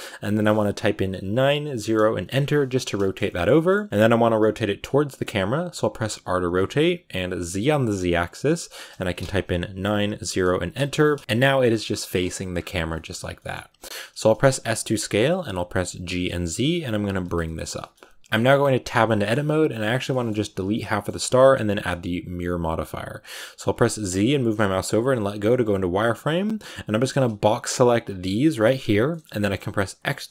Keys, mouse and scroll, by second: 2.4 middle click, 3.0 scroll up 1, 3.1-5.2 shift+middle drag, 5.2-5.9 scroll up 1, 5.9 scroll up 1, 5.9 r, 10.9 middle click, 11.5-11.8 scroll down 5, 11.8 middle click, 12.4-13.2 scroll up 7, 12.8 shift+middle click, 13.2 middle click, 13.8 s, 15.8 g, 17.1 shift+middle click, 17.8-18.2 scroll up 2, 18.2 middle click, 18.8 Tab, 18.9 scroll up 1, 18.9 middle click, 19.6-20.0 scroll down 2, 20.0-24.4 middle drag, 24.4 z, 25.1-25.5 scroll down 2, 25.5-27.9 middle drag, 27.9 b, 28.2 middle click, 29.1 scroll up 2, 29.3-30.3 middle drag.